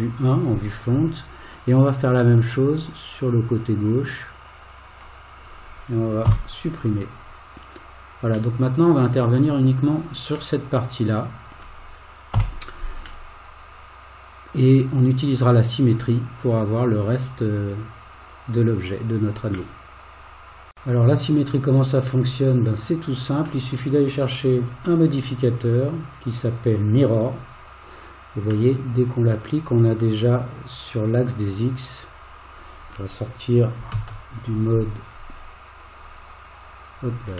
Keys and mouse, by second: 2.8-5.0 drag, 6.3 x, 8.6 middle click, 10.6-11.6 middle drag, 12.4 3, 13.3-19.5 middle drag, 22.3-23.5 middle drag, 24.8-27.4 drag, 28.7-32.9 middle drag, 33.9 alt+z, 36.9 click.